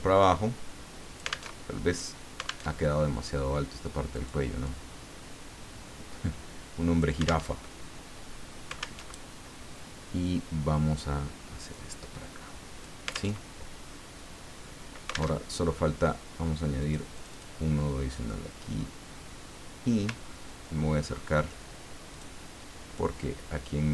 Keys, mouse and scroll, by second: 1.5 alt+Tab, 2.8 alt+Tab, 4.1 click, 4.6-7.3 drag, 7.5 alt+Tab, 9.0 alt+Tab, 10.2-13.1 drag, 13.4 alt+Tab, 15.3 alt+Tab, 16.8 click, 17.1 click, 20.2-20.8 ctrl+scroll up 1, 21.1-21.4 ctrl+scroll up 1, 22.1 click, 22.9-23.9 drag.